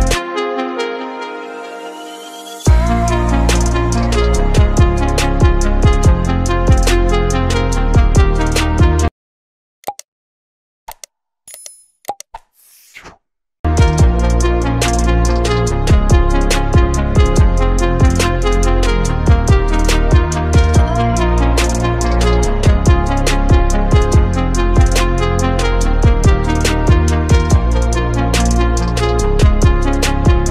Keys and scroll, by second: 0.0-4.4 typing, 5.1 ctrl+z, 5.4 ctrl+z, 6.1 space, 6.5 space, 6.8 space, 7.3 space, 8.1 F9, 8.2 ctrl+-, 9.2 ctrl+z, 9.3 space, 10.4 space, 11.8-14.6 typing, 15.7 space, 15.8 ctrl+z, 15.9 space, 16.5 ctrl+z, 17.2-19.4 typing, 17.8 ctrl+z, 20.1 ctrl+z, 20.7 space, 22.1 space, 22.6 space, 23.0 space, 23.1 ctrl+-, 23.5 space, 24.6 ctrl+space, 25.6 ctrl+z, 25.9 ctrl+z, 27.2 space, 28.5 space, 28.9 space, 29.5 space, 30.2 ctrl+-, 30.4 ctrl+space.